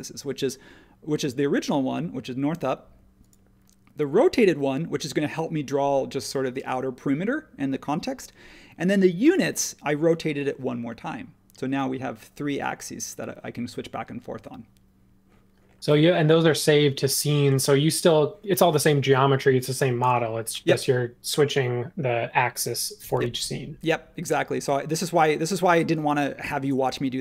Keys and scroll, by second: 23.3 super+1.